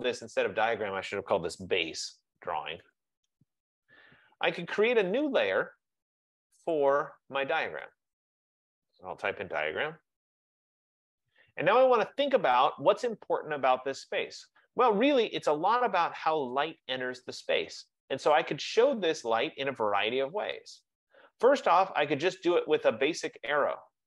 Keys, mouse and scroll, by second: 0.1 click, 0.4 click, 1.5-3.9 typing, 5.3-6.1 typing, 5.6 click, 6.8 click, 8.0 click, 8.2 click, 9.3-11.1 typing.